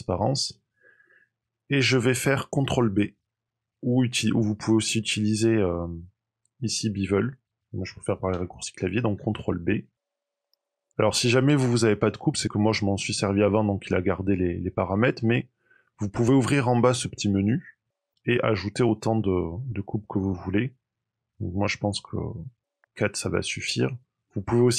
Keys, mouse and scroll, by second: 9.1 ctrl+b, 16.1 click, 17.3 click.